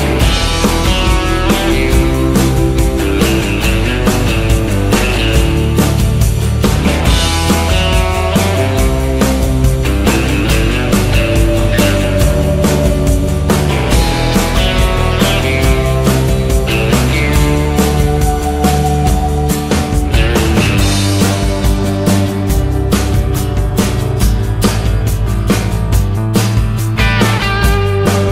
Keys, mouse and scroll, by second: 0.0-1.8 typing, 3.5-5.3 typing, 6.9 z, 7.2 z, 8.2 KP_3, 9.6 click, 10.6 click, 11.0 KP_0, 12.9 click, 13.3 w, 14.6 click, 15.0 KP_0, 15.4 KP_0, 16.3 KP_0, 18.5 n, 18.7 KP_0.